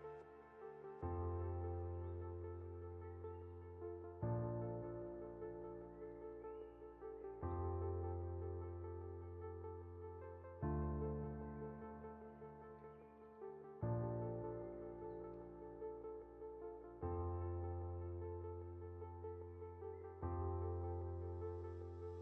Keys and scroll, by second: 15.6 ctrl+0, 18.2 ctrl+g.